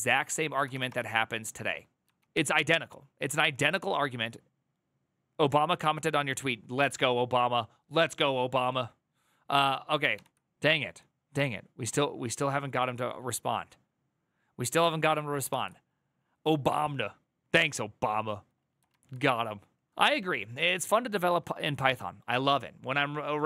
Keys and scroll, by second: 0.4 ctrl+v, 0.6 Return, 1.9 ctrl+v, 2.0 Return, 9.9 ctrl+r, 15.2 alt+[.